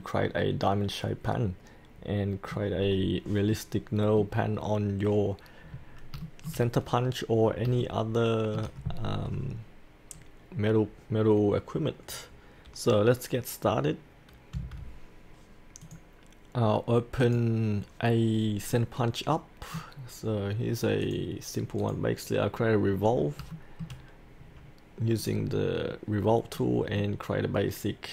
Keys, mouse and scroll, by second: 2.9-3.5 scroll down 1, 3.5-5.1 middle drag, 5.6-6.1 scroll up 1, 6.2 shift+middle click, 6.9-7.7 scroll down 1, 7.8 shift+middle click, 8.9 scroll up 1, 9.2-14.5 scroll down 1, 14.5 F8, 15.8 click, 18.2-18.7 scroll up 1, 18.7-20.3 middle drag, 21.0 click, 22.9-23.4 scroll down 1, 23.5 shift+middle click, 25.2 click, 25.8-26.5 scroll up 1, 26.5-27.0 scroll down 1, 27.0-28.1 middle drag.